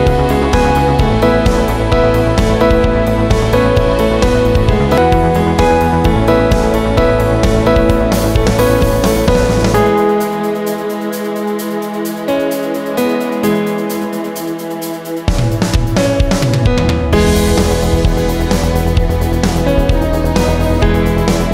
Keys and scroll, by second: 0.8 ctrl+t, 5.0 Return, 7.8-10.6 typing, 15.2-20.1 typing.